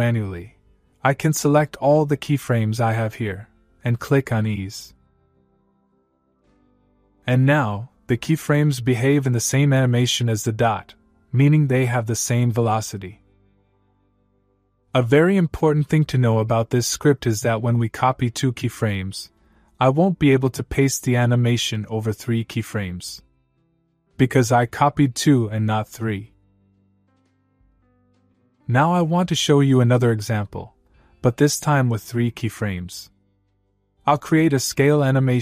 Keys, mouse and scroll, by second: 2.0-3.1 click, 5.6 click, 7.9-9.0 click, 11.7 click, 20.3-21.2 click, 23.5 click, 25.1 click, 26.7-27.6 click, 32.7-34.7 click.